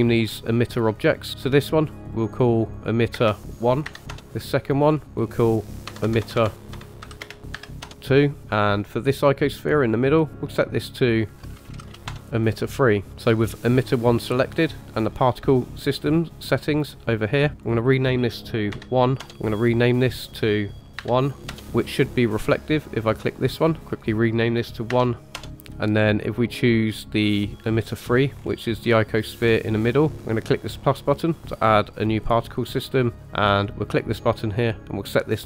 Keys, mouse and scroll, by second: 0.8 click, 1.0 click, 1.9 click, 2.1-4.1 drag, 5.0-7.9 drag, 6.0 BackSpace, 6.2 BackSpace, 8.5 click, 10.9 click, 11.1 shift+click, 11.7 t, 13.4 click, 17.5 click, 19.7 click, 23.2 click, 23.9 click, 27.6 click, 28.4-29.1 scroll up 5, 29.4-29.9 scroll down 4, 32.3 click, 33.8 click.